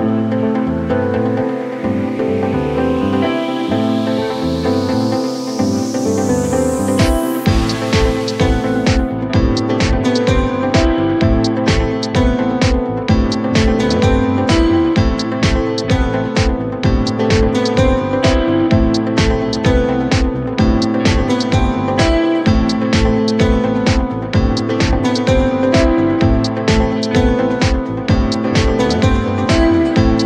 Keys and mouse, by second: 0.5 alt+click, 1.7 click, 2.2 alt+middle click, 2.5 w, 3.1-4.4 drag, 4.7 alt+middle click, 5.1 click, 5.7-9.3 drag, 11.0-12.6 drag, 13.0-14.0 drag, 14.5 alt+click, 15.4 r, 16.4-17.9 drag, 18.1 alt+middle click, 18.8 click, 20.0 alt+click, 20.6-23.4 drag, 24.8 click, 25.8 click, 26.5 alt+middle click, 27.0 r, 27.8 click, 27.9-29.8 drag.